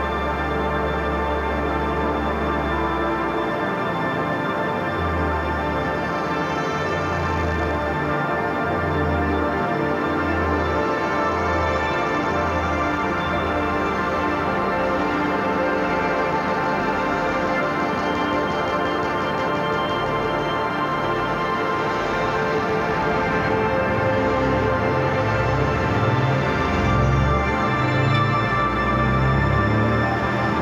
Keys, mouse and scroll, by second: 1.7-8.2 drag, 8.2-14.2 drag, 14.6 ctrl+y, 16.1 click, 18.7 click, 20.5 click, 23.1 shift+click, 23.6 ctrl+g, 24.0 click, 25.0 shift+click, 25.9 Right, 27.4-30.6 drag.